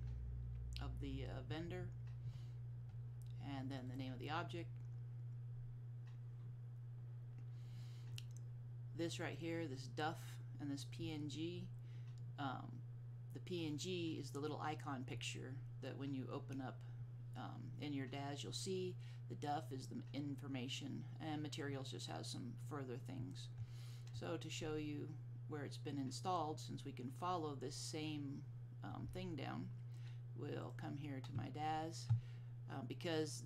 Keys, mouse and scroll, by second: 4.0-5.7 drag, 30.7 click, 31.5 click, 31.9 click.